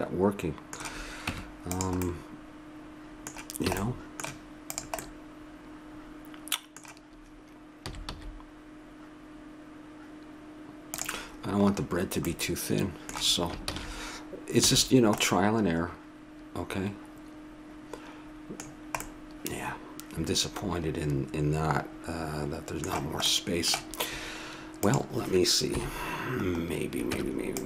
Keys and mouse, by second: 1.3 Tab, 2.0-3.7 middle drag, 3.7 a, 4.0 middle click, 4.7 right click, 7.8 s, 12.3-13.7 middle drag, 13.7 ctrl+z, 14.6 a, 14.8-16.0 middle drag, 18.7-20.8 middle drag, 23.3-24.8 middle drag, 24.8 click, 25.7 KP_7, 27.1 Tab.